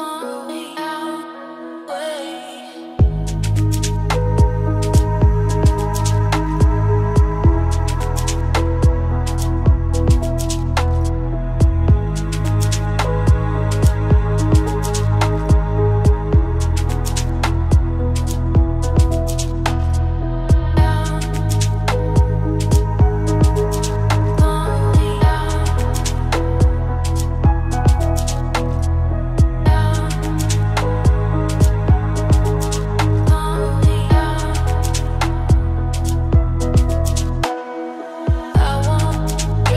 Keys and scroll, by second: 8.0 ctrl+space.